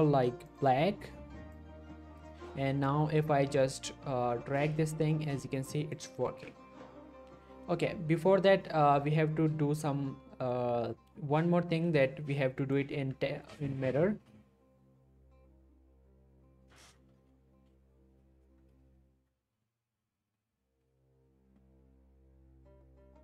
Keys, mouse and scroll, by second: 1.3-1.6 click, 2.1-2.5 scroll up 2, 2.9-3.5 shift+middle click, 4.6-6.1 drag, 6.2 ctrl+z, 7.6-8.7 scroll up 2, 8.7-9.5 scroll down 1, 12.3-13.0 click, 12.9 ctrl+z, 14.2-14.8 scroll down 1.